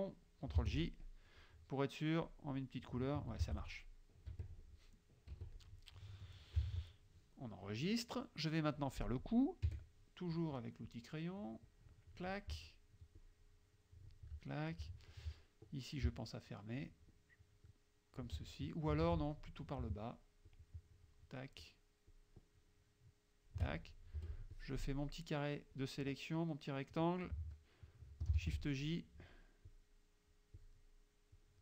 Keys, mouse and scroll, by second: 0.7 shift+j, 2.3 click, 3.5 ctrl+z, 4.3 KP_Subtract, 5.4 KP_Subtract, 5.7 click, 6.0 middle click, 6.5 click, 6.7 ctrl+s, 7.4-8.5 drag, 9.1 click, 9.6 middle click, 9.7 F6, 11.0-12.3 drag, 13.2-14.5 shift+drag, 14.5 shift+click, 16.8-18.5 shift+drag, 18.7 ctrl+shift+click, 19.1 ctrl+z, 19.4 ctrl+click, 20.5 shift+click, 22.2-23.7 shift+drag, 24.2 F2, 24.6-26.1 drag, 28.4 shift+j, 29.7 click, 31.4-31.6 drag.